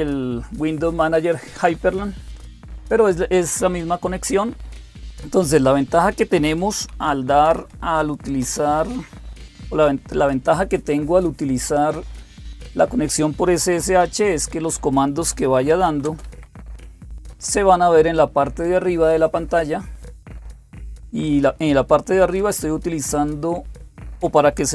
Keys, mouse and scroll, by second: 6.9-7.8 typing, 8.2 Return, 14.8-16.9 typing, 17.1 Return.